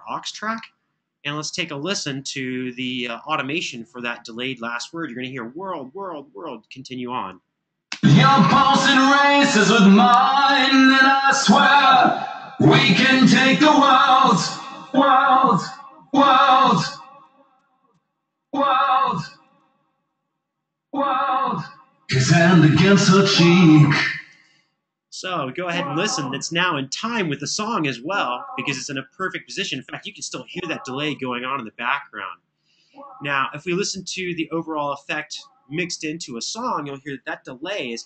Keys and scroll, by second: 1.9 Escape, 7.6 space, 9.4 super+], 9.6 super+], 19.9 super+[, 24.0 space.